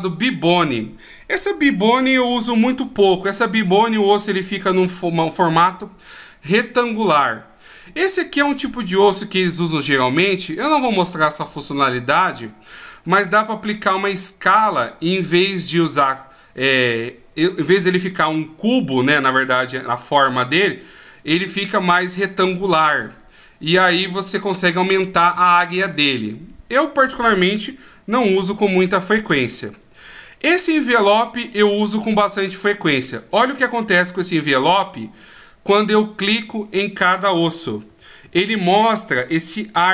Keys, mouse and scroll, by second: 2.4-3.6 ctrl+scroll up 3, 3.6 middle click, 8.9 right click, 9.5 right click, 10.1 right click, 10.6 right click, 12.4 right click, 13.1 right click, 18.2 middle click, 22.1 middle click, 27.8-28.8 ctrl+scroll down 4, 28.8 middle click, 28.8 ctrl+scroll down 1, 30.7 click, 34.7 right click, 35.7 right click, 36.6 right click, 37.9 a, 38.2 a.